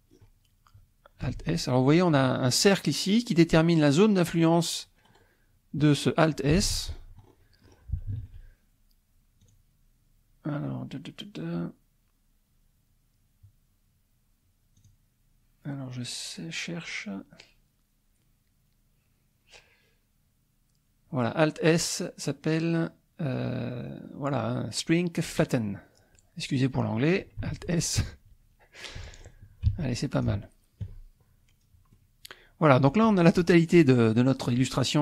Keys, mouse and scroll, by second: 1.3 alt+s, 5.1 scroll down 2, 6.0 scroll up 1, 6.6 Escape, 6.9-7.9 scroll up 3, 8.2 alt+z, 9.4-11.0 drag, 14.8-16.5 drag, 27.5 alt+s, 28.8 click, 29.4 middle click, 29.8 Tab, 30.2 scroll down 1, 30.4 shift+middle click, 30.4 shift+click, 31.6 scroll down 1, 31.9-33.6 drag, 33.6-34.4 scroll up 2, 34.7-35.0 drag.